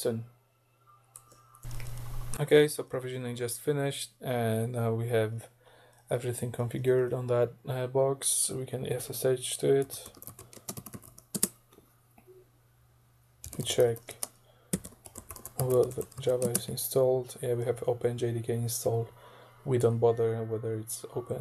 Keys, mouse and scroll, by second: 1.6 click, 8.7-11.6 typing, 13.2-16.7 typing.